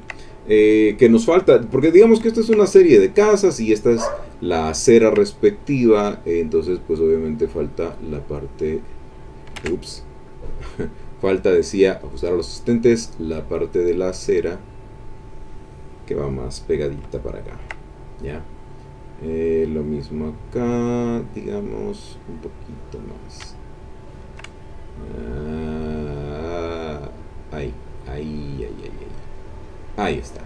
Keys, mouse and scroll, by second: 0.0 ctrl+click, 2.3 ctrl+click, 3.2 click, 4.0 click, 4.8 ctrl+click, 5.4 ctrl+click, 5.9 middle click, 6.3-7.8 drag, 7.9-9.4 drag, 9.6 ctrl+z, 10.5 click, 11.9 click, 14.3-16.5 drag, 16.5 click, 17.1-18.2 ctrl+drag, 19.8-22.0 drag, 25.3 click, 26.2 click, 26.8 click, 27.2-30.2 drag.